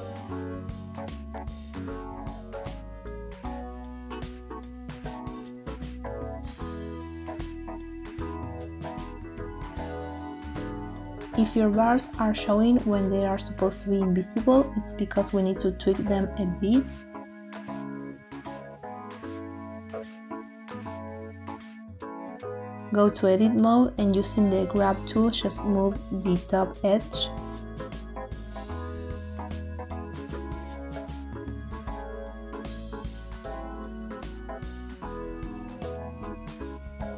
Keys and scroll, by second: 0.9 space, 5.3 space, 9.4 typing, 30.4 ctrl+z.